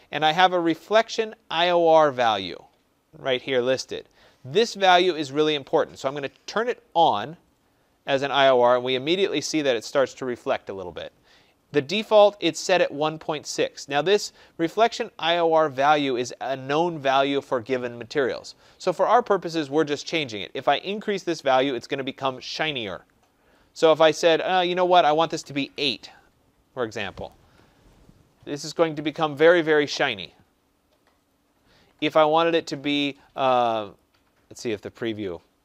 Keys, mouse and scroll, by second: 7.0-12.1 drag, 24.0 click, 25.0-26.3 typing, 27.3 Tab, 33.9-35.6 drag.